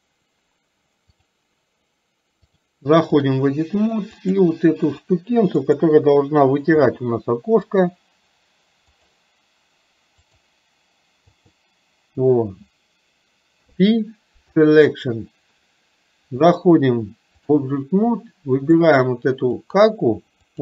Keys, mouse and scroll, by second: 1.2 click, 2.5-3.6 drag, 4.4 click, 5.7 click, 16.5-17.7 drag, 19.7 click.